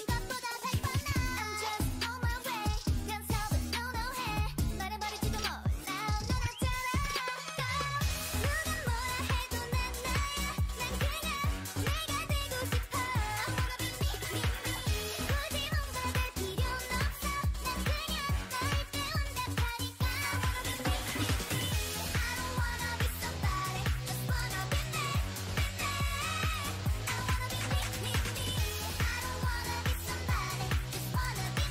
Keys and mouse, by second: 1.7 a, 2.0 k, 4.6 right click, 4.8 x, 5.5 click, 5.6 a, 6.5 x, 6.7 a, 7.1 click, 8.5 k, 10.4 a, 14.4 ctrl+r, 15.8 a, 16.1 k, 18.5 k, 21.0-23.8 right drag, 21.2 x, 22.3 x, 25.3 a, 26.6 g, 28.0 KP_3, 28.2 KP_3, 28.8 z, 29.4 c, 31.3 g.